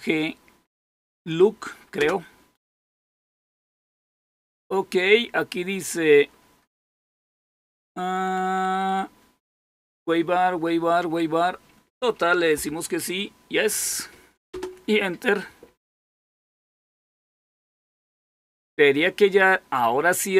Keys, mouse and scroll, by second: 14.4 Return.